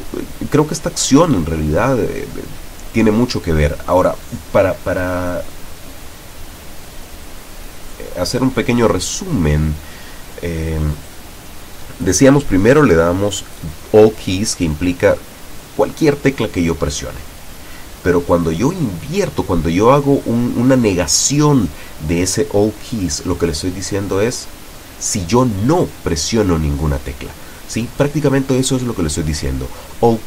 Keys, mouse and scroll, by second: 1.1 click, 3.3-4.6 drag, 5.3 click, 6.3 click, 13.4 click, 14.0-17.7 drag.